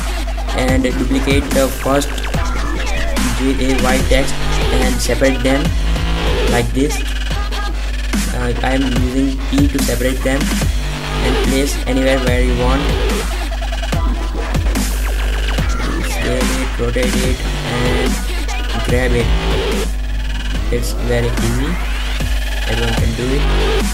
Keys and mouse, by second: 0.3 Tab, 0.6 p, 1.1 Tab, 2.0 g, 2.5-3.4 middle drag, 4.6 r, 6.0-6.4 middle drag, 6.4-6.9 drag, 7.7-8.1 middle drag, 8.7 right click, 10.0-11.0 middle drag, 11.5 r, 12.0 r, 13.3 middle click, 13.5-14.1 middle drag, 15.3 middle drag, 18.4 g, 19.3 r, 20.2 r, 20.8-22.1 middle drag, 23.2-23.9 typing.